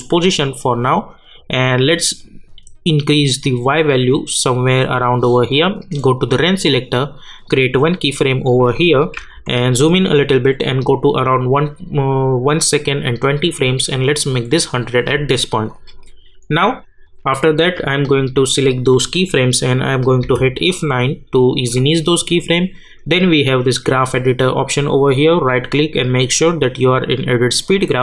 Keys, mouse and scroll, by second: 0.0-6.3 drag, 9.2 =, 10.8 click, 14.3-20.2 drag, 20.2 F9, 23.7 click, 25.4 right click.